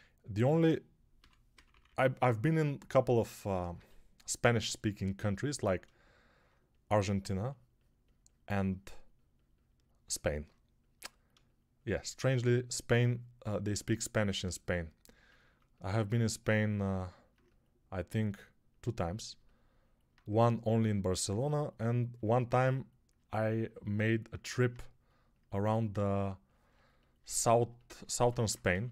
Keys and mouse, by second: 1.0 6, 1.4 ], 1.6 ], 1.7 ], 3.6 g, 28.6 3.